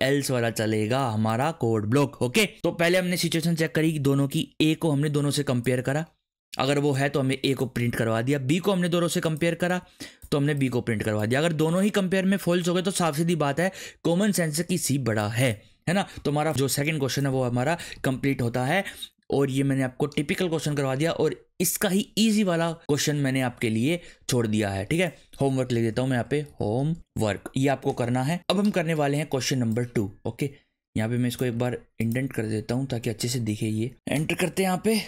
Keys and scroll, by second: 18.0 ctrl+/, 25.7-27.8 typing, 28.4 ctrl+/, 31.5 Tab, 34.1 BackSpace, 34.4 Return.